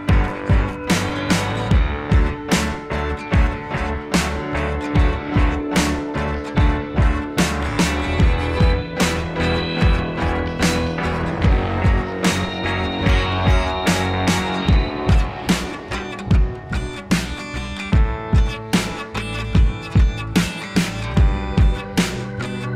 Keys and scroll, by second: 0.0 Down, 0.9 Down, 1.2 Down, 1.4 Right, 1.4 Left, 1.5 Down, 1.5 Right, 4.7 ctrl+c, 4.8 ctrl+v, 5.1 ctrl+z, 6.5 Left, 6.6 Right, 7.0 Left, 8.3 Delete, 8.6 Delete, 10.2 Down, 10.3 Left, 10.4 Down, 10.5 Up, 11.1 ctrl+z, 11.3 Left, 11.9 ctrl+z, 12.0 Delete, 16.2 ctrl+z, 20.5 ctrl+z.